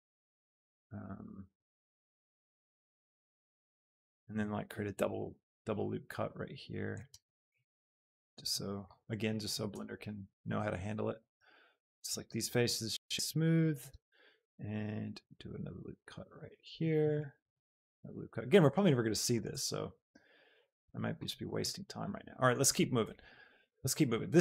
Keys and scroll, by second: 4.1 Tab, 4.8 ctrl+r, 7.0 Tab, 14.4 ctrl+r, 19.6 Tab.